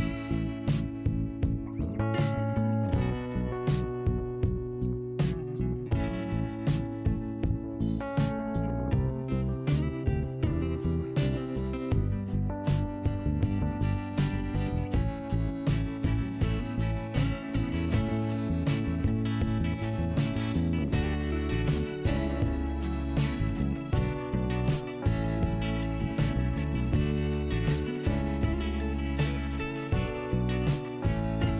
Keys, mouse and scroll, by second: 2.3 click, 4.3 click, 6.4 click, 7.0 click, 12.4 click, 13.0 click, 14.3 click, 16.2 click, 17.7 click, 17.8 click, 17.9 click, 18.4 click, 19.8 click, 20.8 click, 25.5 click, 27.5 click.